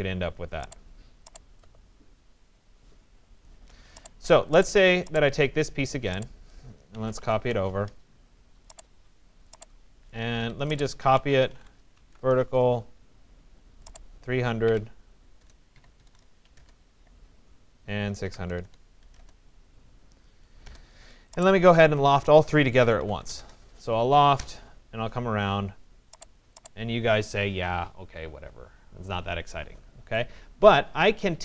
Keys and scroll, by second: 6.9 Return, 10.2 Escape, 11.7 Return, 14.7 6, 15.4 BackSpace, 15.7 3, 16.0 0, 16.6 Return, 18.0-19.0 typing, 19.2 Return.